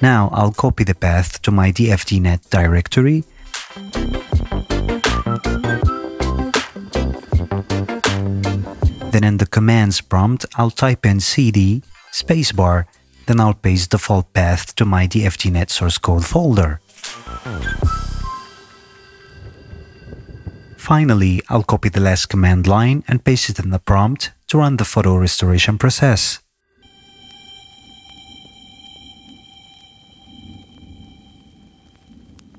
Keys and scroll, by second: 11.3 c, 11.4 d, 11.6 space, 16.5 Return, 30.2 Return.